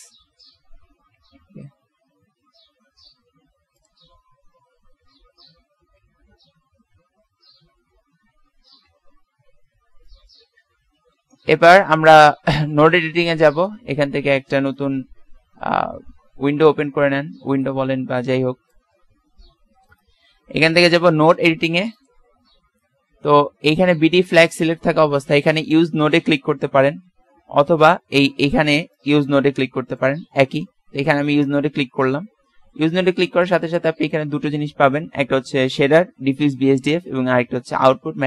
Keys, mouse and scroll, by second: 4.4 middle click, 5.3 KP_7, 6.3 KP_Decimal, 8.7 KP_1, 10.8 Tab, 31.6 click, 33.1-35.4 middle drag.